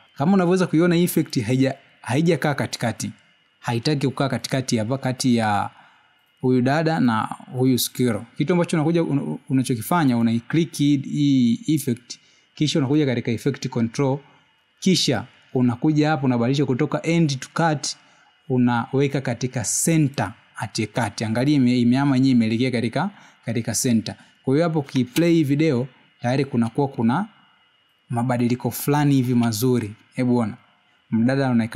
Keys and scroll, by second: 28.7 space, 30.7 space.